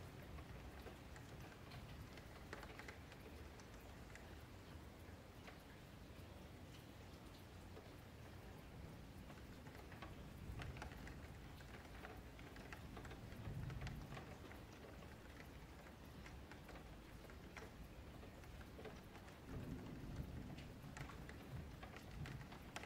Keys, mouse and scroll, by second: 0.5 F3, 0.9 3, 1.1 click, 2.7 e, 4.0 Tab, 4.2-5.0 scroll down 1, 5.0 g, 6.3 s, 7.6 r, 8.6 s, 10.3 f, 11.1 g, 12.2 s, 14.2 g, 15.4 scroll down 5, 15.7-16.1 scroll up 2, 15.7-16.0 middle drag, 16.1 F3, 16.5 scroll down 1, 16.7-18.6 middle drag, 18.6 click, 21.5 click, 22.6-22.8 middle drag.